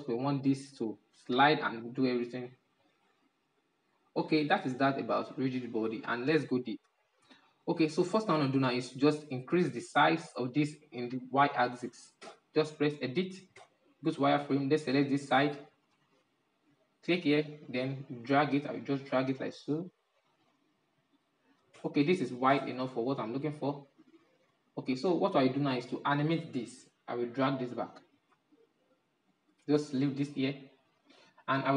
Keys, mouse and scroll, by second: 0.2-1.3 middle drag, 1.3-4.9 drag, 4.9-8.3 middle drag, 8.3 right click, 8.8 scroll down 3, 9.4-11.7 middle drag, 11.7 Tab, 13.0 shift+z, 13.9 click, 16.6-19.0 drag, 20.1-21.2 drag, 21.2 Tab, 21.6 middle click, 22.0 shift+z, 22.7-24.7 middle drag, 24.7 right click, 25.3-26.7 middle drag, 26.7-29.5 drag, 30.2-31.1 drag, 31.1-31.7 shift+middle drag.